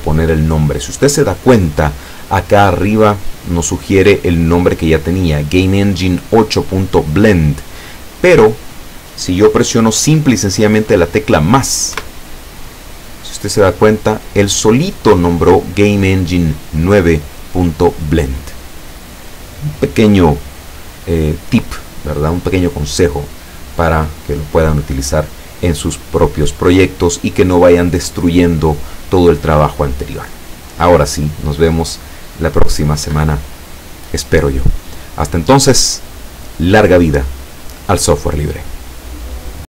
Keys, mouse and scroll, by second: 12.0 KP_Add, 31.2 click.